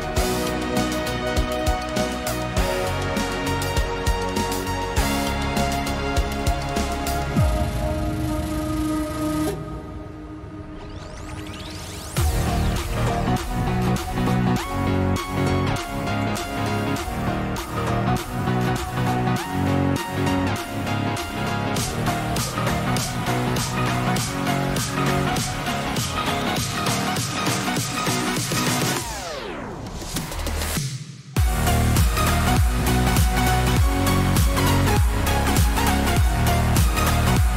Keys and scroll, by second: 10.0 Return, 15.4 t.